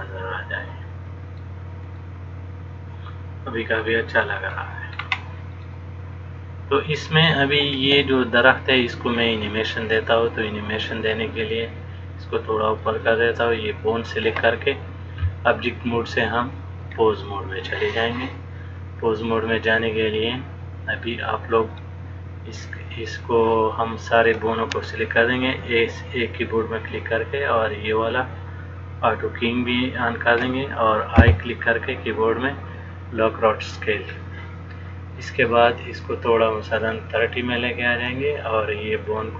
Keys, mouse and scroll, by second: 2.1 middle click, 5.2 scroll up 1, 5.8 middle click, 5.8-7.4 scroll up 1, 11.8 click, 14.0 click, 16.0 click, 19.7 middle click, 21.8 click, 28.1 click, 36.7 click, 39.2 click.